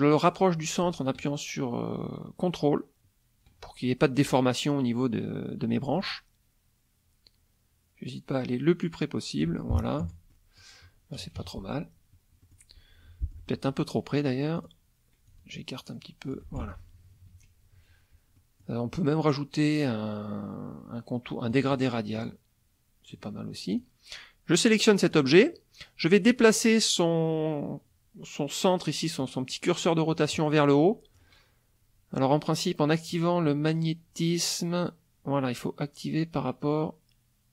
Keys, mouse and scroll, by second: 10.0 F1, 10.3 middle click, 11.3 KP_Subtract, 12.4 middle click, 13.0 F2, 13.2 click, 14.5 click, 15.3-16.5 ctrl+drag, 16.6 ctrl+F1, 16.8 ctrl+KP_Subtract, 18.3 click, 21.5 click, 22.1 click, 23.7 click, 25.1 click, 29.2 click, 30.1-31.3 drag.